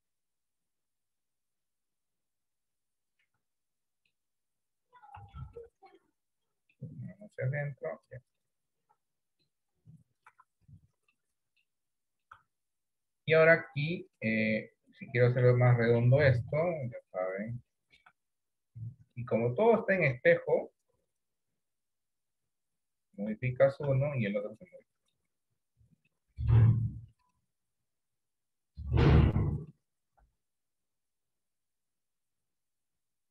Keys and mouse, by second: 2.6 click, 3.4 Tab, 3.6 middle click, 5.4 shift+middle click, 6.4-8.2 drag, 8.5 middle click, 10.4 Tab, 11.2 middle click, 12.0 shift+middle click, 13.2 click, 16.6 KP_1, 17.8 shift+middle click, 19.3 click, 20.6-21.9 drag, 22.4 click, 23.6 shift+middle click, 24.7 middle click, 26.2 middle click, 28.1 click, 29.4 middle click, 30.3 KP_1, 31.8 click, 33.1-33.3 drag.